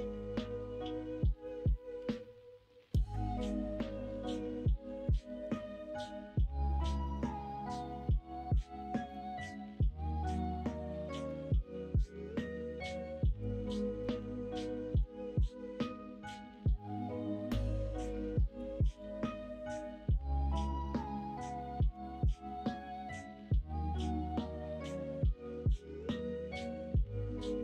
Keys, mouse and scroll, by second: 6.0-7.1 middle drag, 7.4 shift+middle click, 8.2 middle click, 9.4 middle click, 11.9 middle click, 12.3 c, 13.8 ctrl+z, 14.1 middle click, 14.8 middle click, 16.7 middle click, 18.5 c, 22.7-24.3 middle drag.